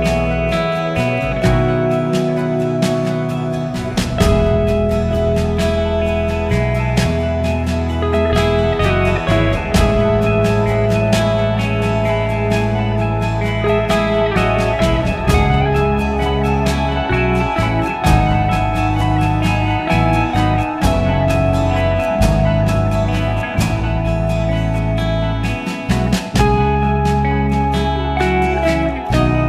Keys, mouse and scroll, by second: 10.0-12.0 drag, 12.9-16.1 scroll up 4, 16.1 click, 16.5-17.0 scroll up 4, 17.0-18.2 scroll down 4, 18.3 click, 18.9-19.8 scroll up 5, 19.8-21.1 scroll down 3, 21.2 click.